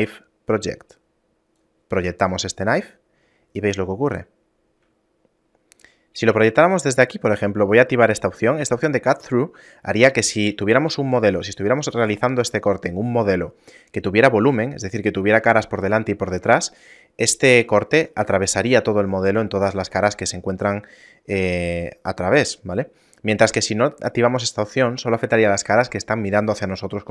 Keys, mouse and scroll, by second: 1.8 click, 5.3 shift+middle click.